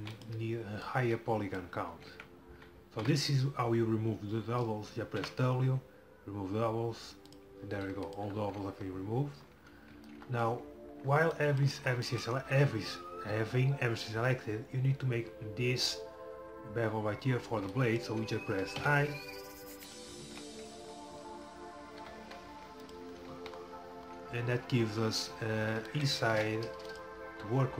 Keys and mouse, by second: 0.0 e, 0.9-2.8 drag, 2.0 a, 2.1 a, 3.0 w, 7.4 w, 8.2 click, 14.1 middle click, 18.9 i, 20.3 ctrl+z, 22.0 i, 23.4 z, 26.4 x.